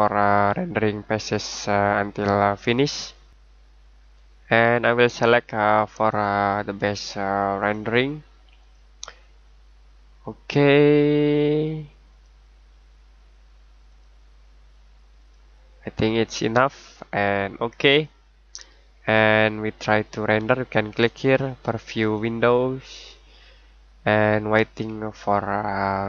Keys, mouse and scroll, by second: 0.5 click, 10.8 click, 12.1 click, 17.9 click, 22.0 click.